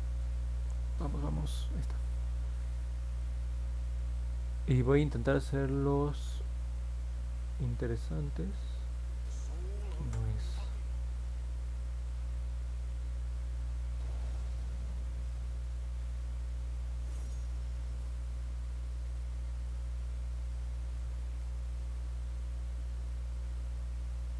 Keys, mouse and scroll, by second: 1.3 click, 8.0 click, 9.8 ctrl+z, 13.1 click, 15.5-17.2 drag, 18.1 ctrl+z, 19.2-20.5 drag, 21.3 ctrl+z, 22.5-24.3 drag.